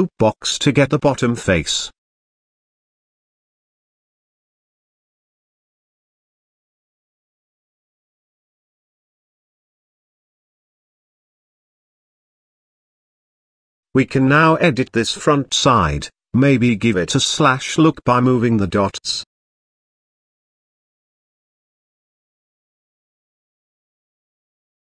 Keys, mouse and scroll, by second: 0.2-2.3 middle drag, 5.3-6.3 drag, 6.7-8.6 middle drag, 8.9-9.8 shift+middle drag, 9.8-10.3 scroll up 1, 10.3-11.2 scroll down 2, 12.4 KP_1, 13.1 shift+middle click, 13.4-15.0 scroll up 6, 13.8 shift+middle drag, 15.0 z, 15.6 click, 16.3 g, 17.6 click, 18.2 g, 20.9-21.3 scroll down 1, 21.3 middle click, 21.7 z, 22.1-22.5 scroll down 2, 22.5-24.6 shift+middle drag, 24.6-24.9 scroll up 2.